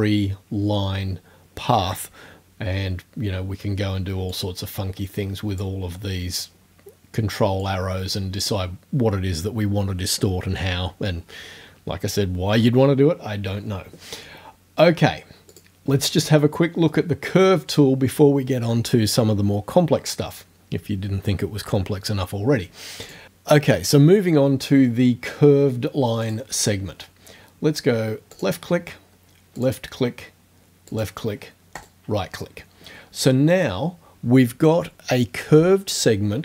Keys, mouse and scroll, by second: 4.4-5.8 drag, 7.6-8.6 drag, 15.5 click, 23.1 click, 26.2 click, 28.4 click, 29.6 click, 30.9 click, 31.8 right click.